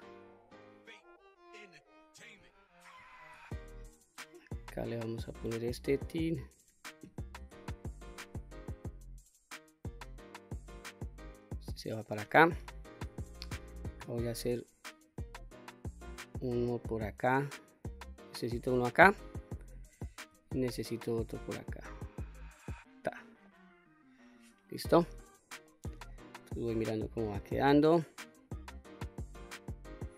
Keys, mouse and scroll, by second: 3.0 ctrl+r, 5.8 click, 8.0 ctrl+r, 11.2 click, 11.7 middle click, 13.1 ctrl+r, 19.0 click, 20.3 ctrl+r, 22.8 click, 23.4-24.3 middle drag, 25.2-25.6 scroll up 2, 25.6-26.1 middle drag, 26.5-28.2 middle drag, 28.6-28.9 scroll down 1, 28.9-30.1 middle drag.